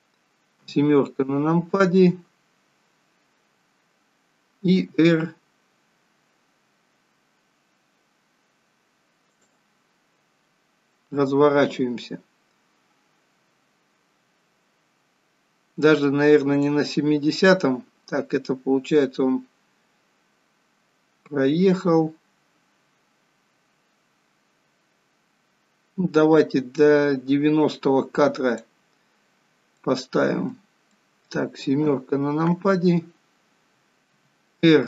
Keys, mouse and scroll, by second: 0.6 KP_7, 1.6 scroll down 2, 16.8 click, 29.7 middle click, 30.8 middle click, 31.8 KP_7, 34.1 r.